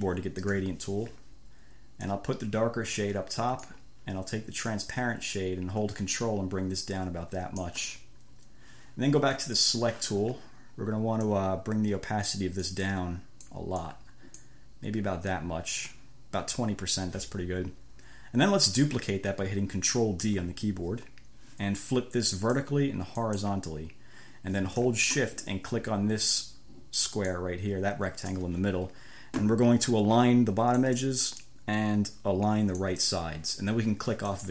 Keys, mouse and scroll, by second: 0.8 g, 2.3-4.1 drag, 4.9-8.1 drag, 9.8 click, 11.5-12.8 drag, 12.9-13.9 drag, 14.1 click, 20.5 ctrl+d, 22.6-23.1 scroll up 2, 23.5-23.8 scroll up 2, 27.3 shift+click, 31.0 click, 33.1-33.5 scroll up 2.